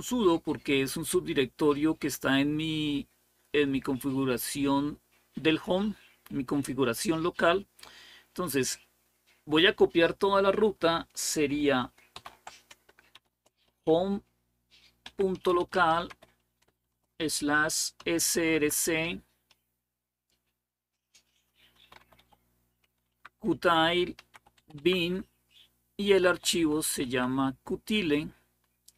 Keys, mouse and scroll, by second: 12.9 typing, 14.6-16.6 typing, 17.8-18.1 typing, 18.4 Tab, 21.3-22.6 typing, 22.9 Tab, 23.7-26.4 typing, 26.8 Tab.